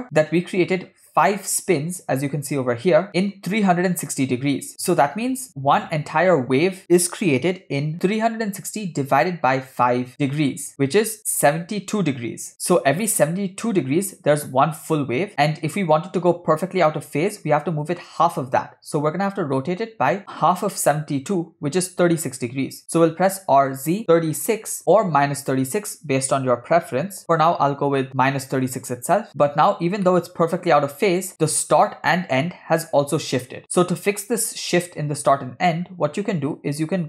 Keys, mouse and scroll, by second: 22.9 r, 29.7-30.0 scroll up 2, 30.1 middle click, 30.6 space, 31.3 shift+space, 31.4-31.8 shift+middle drag, 35.7-37.0 scroll down 1.